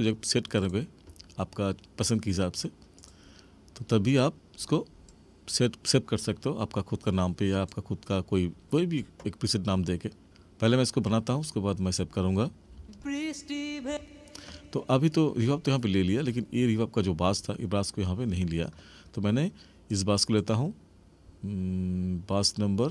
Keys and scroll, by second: 12.6 space, 13.8 space.